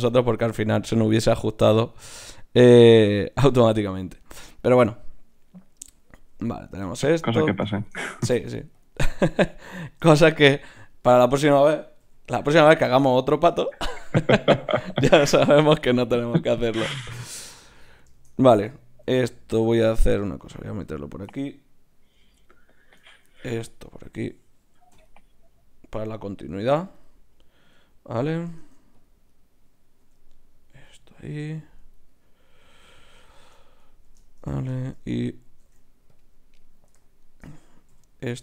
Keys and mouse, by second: 0.4 g, 3.9 middle click, 4.9-6.2 middle drag, 6.2 g, 8.3 ctrl+Tab, 9.1-11.5 drag, 12.0 f, 13.6 f, 17.1-19.0 middle drag, 19.0 ctrl+r, 20.4-22.7 drag, 22.7 middle click, 23.2 ctrl+r, 24.2-26.8 drag, 24.9 f, 26.8 f, 28.6 ctrl+Tab, 30.0 g, 32.5-34.4 right drag, 32.7 g, 33.0-34.8 drag, 35.6 ctrl+Tab, 36.5-38.4 drag, 37.9 f.